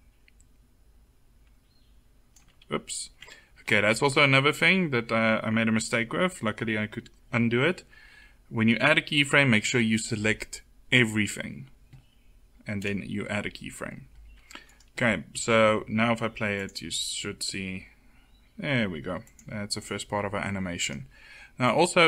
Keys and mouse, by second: 2.6 ctrl+z, 9.2 a, 9.5 a, 16.4-20.7 drag, 20.7-22.0 middle drag.